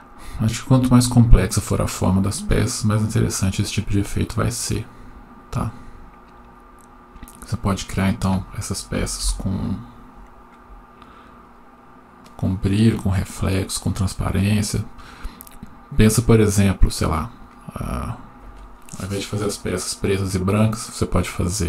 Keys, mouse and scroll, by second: 11.7 F12.